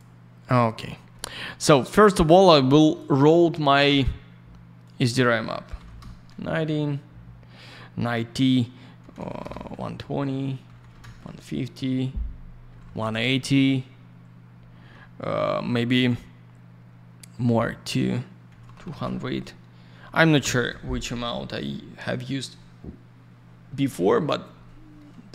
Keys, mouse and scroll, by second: 0.4 middle click, 0.6 middle click, 0.8-1.1 scroll down 1, 1.1 middle click, 1.3 middle click, 1.8 click, 2.6 click, 2.7 click, 2.8 click, 2.9 double click, 4.8 click, 4.9 click, 5.7 typing, 5.9 Return, 9.4 Return, 10.4-11.2 typing, 12.4-13.2 typing, 20.1 BackSpace, 20.3 Return.